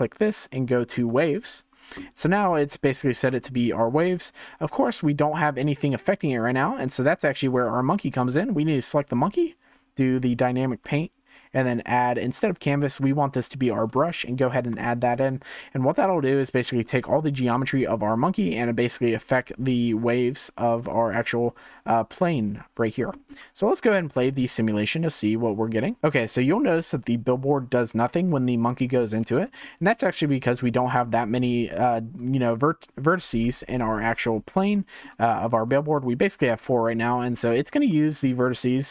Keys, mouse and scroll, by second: 3.4-6.4 shift+middle drag, 7.5 click, 10.8-20.9 drag, 21.9 click, 23.1-24.0 shift+middle drag, 24.0-29.2 drag, 29.6-30.1 shift+middle drag, 30.1-30.7 scroll down 2, 30.7-31.2 shift+middle drag, 31.2 Tab, 32.1 click, 33.2 1, 33.5 click, 34.3 scroll up 2, 34.7 shift+middle click, 35.6-36.7 drag, 37.3-37.9 scroll down 2, 37.9-38.9 shift+middle drag.